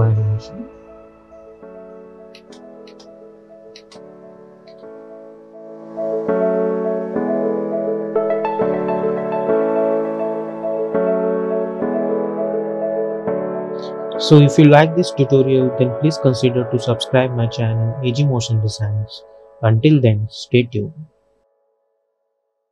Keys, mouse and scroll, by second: 2.4 space, 4.8 n.